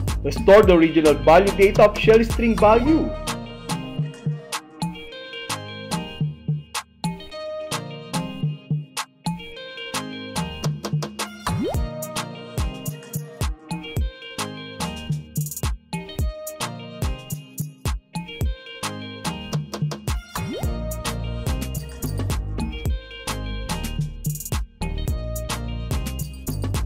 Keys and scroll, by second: 3.2 h, 4.8 h, 5.9 h, 7.5 Right, 9.2 s, 10.2 s, 11.3 s, 12.7 Right, 14.7 m, 15.8 m, 17.0 Right, 18.4 w, 19.4 w, 20.3 w, 21.6 w, 22.3 w, 23.3 w, 24.3 w, 25.4 w, 26.4 w.